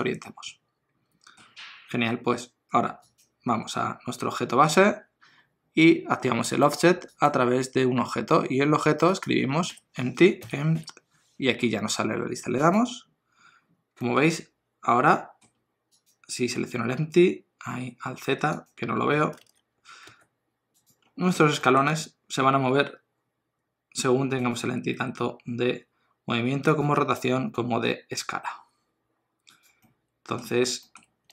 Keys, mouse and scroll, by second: 3.1 click, 7.1 click, 14.0 middle click, 16.0 click, 16.8 alt+z, 18.5 click, 19.4 alt+z, 20.1 g, 21.0-21.4 scroll down 1, 21.9 middle click, 21.9 g, 25.0 r, 27.0 s, 29.8 middle click, 30.5-31.3 scroll up 4, 30.8 shift+middle click.